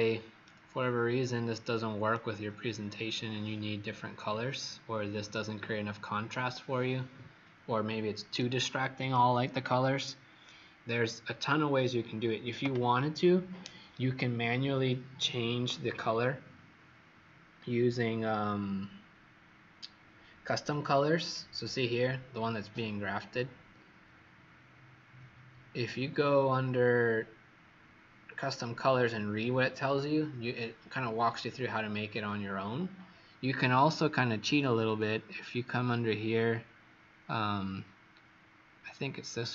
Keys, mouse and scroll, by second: 0.4 right click, 2.8-3.2 scroll down 2, 4.6-5.1 scroll up 1, 5.3 right click, 20.6 click.